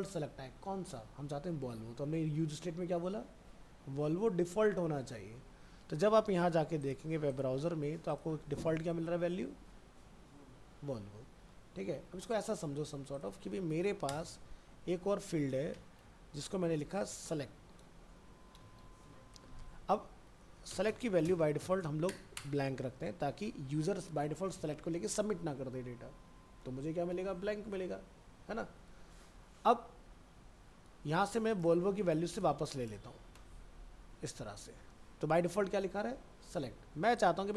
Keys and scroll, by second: 11.9 alt+Tab, 17.4 shift+Left, 20.7 shift+Left, 23.0 ctrl+s, 30.2 ctrl+s, 32.2 ctrl+x, 33.5 ctrl+s, 34.5 alt+Tab.